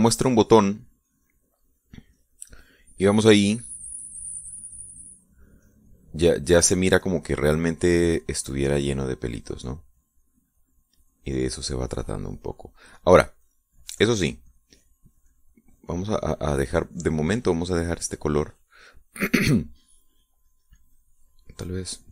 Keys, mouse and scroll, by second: 0.0-6.3 shift+drag, 7.1 shift+click, 7.3 middle click, 8.1-9.3 middle drag, 9.6-13.5 drag, 13.9 click, 14.9-17.4 drag, 17.5-19.5 drag, 21.1 click, 21.4-22.1 drag.